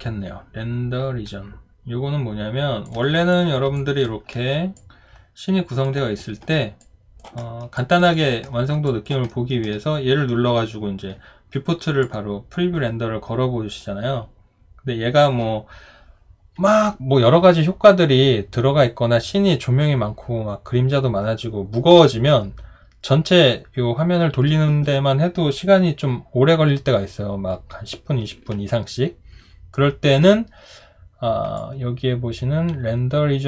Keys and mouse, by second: 3.8 alt+click, 6.2 alt+right click, 7.4 alt+middle click, 7.8 alt+click, 8.1 alt+right click, 8.5 alt+middle click, 8.9 alt+click, 9.3 alt+middle click.